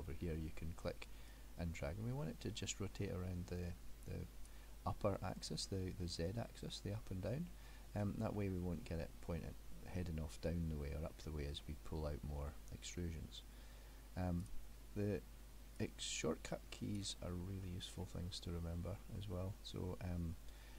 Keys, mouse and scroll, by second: 1.3 click, 5.2 middle click, 8.4 middle click, 14.5 click, 15.8 click, 17.3-17.7 scroll down 2, 17.7 middle click.